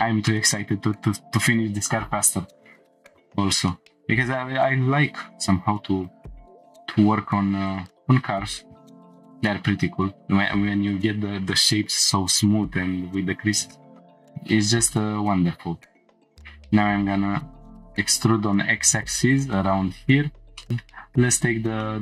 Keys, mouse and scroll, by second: 0.3-0.7 shift+middle drag, 0.8 Tab, 2.9 shift+middle click, 3.1 2, 3.7 shift+middle click, 5.4 shift+d, 6.0 right click, 6.5 p, 7.1 Tab, 7.7-8.9 drag, 9.7 click, 10.1 Tab, 14.0 click, 14.0 1, 14.9 ctrl+click, 16.2 e, 16.2 x, 19.3 click, 20.0 scroll up 1, 20.6 shift+middle click, 20.7 click, 20.7 scroll up 2, 21.8-22.0 shift+middle drag.